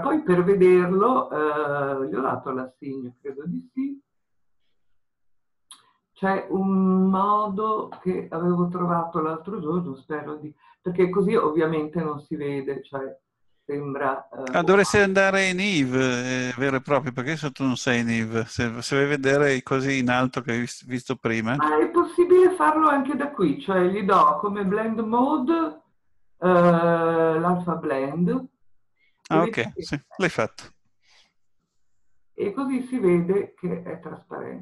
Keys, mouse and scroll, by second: 3.2 scroll up 1, 3.3-11.8 drag, 11.8-13.4 scroll up 2, 13.4-15.4 scroll up 1, 28.4-30.9 drag, 30.9-34.6 middle drag.